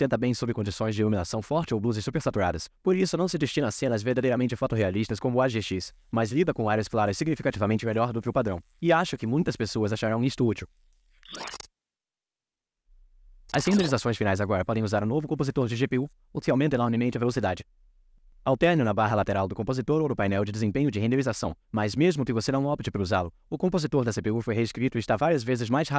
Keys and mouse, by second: 0.6 click, 2.1-3.2 drag.